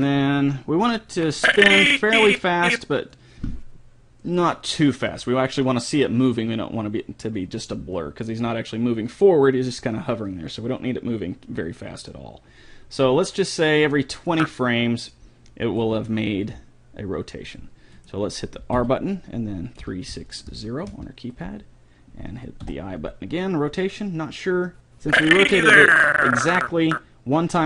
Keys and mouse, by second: 0.9-2.3 drag, 14.3-16.2 drag, 15.8 r, 18.7 r, 22.7 i, 24.7 click.